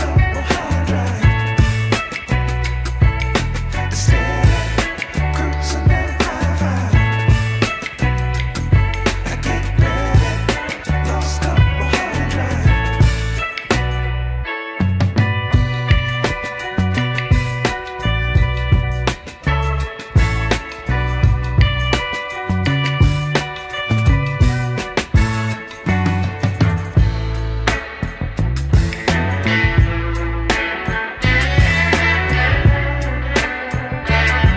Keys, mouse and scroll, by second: 3.1-3.5 middle drag, 3.5 Tab, 3.9 click, 4.9 shift+s, 7.4 Tab, 8.4 KP_1, 9.5 shift+a, 12.2 s, 14.2 s, 15.5 shift+middle drag, 16.6 click, 17.7 s, 20.0 g, 27.8 g.